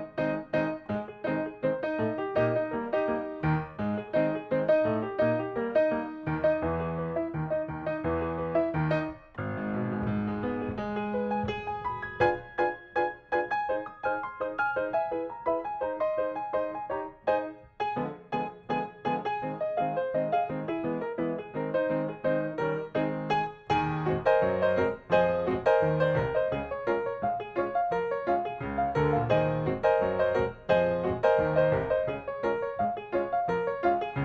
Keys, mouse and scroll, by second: 0.3 click, 1.0 Delete, 1.3 middle click, 2.5 click, 3.2 s, 4.7 click, 7.4 right click, 8.7 click, 9.3 scroll up 1, 9.9 click, 11.1 middle click, 11.5 click, 13.0 m, 14.2 ctrl+click, 14.3 scroll down 1, 14.5 shift+middle click, 15.4 click, 16.3 scroll down 1, 16.6 middle click, 16.6-17.7 shift+scroll up 2, 17.7 click, 19.6 scroll up 1, 19.8 middle click, 20.9 click, 21.3 shift+middle click, 23.1 click, 23.6 scroll up 1, 24.8 click, 26.0 KP_0, 27.2 middle click, 27.8 click, 29.9 KP_0, 30.0 KP_Decimal, 30.2 KP_5, 31.0 middle click, 31.7 click, 33.9 KP_0.